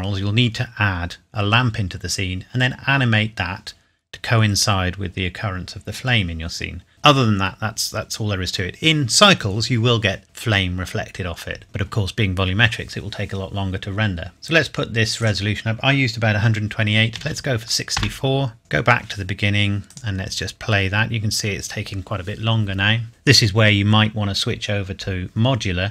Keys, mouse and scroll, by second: 0.3-1.0 scroll up 1, 1.0 scroll down 1, 14.3 click, 17.2 KP_6, 18.0 KP_Enter, 18.6 click.